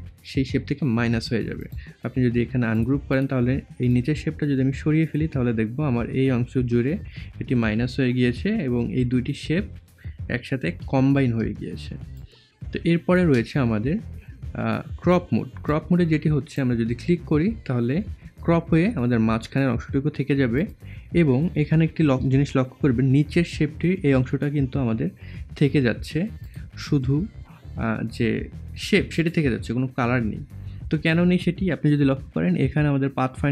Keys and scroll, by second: 10.9 ctrl+z.